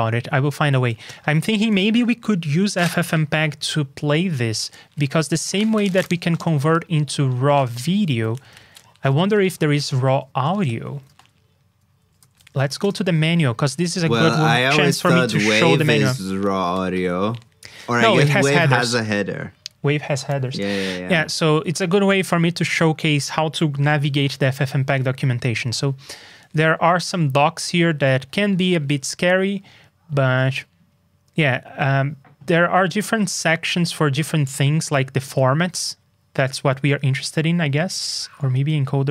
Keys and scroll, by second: 8.2 super+c, 8.4 super+Tab, 11.0 super+t.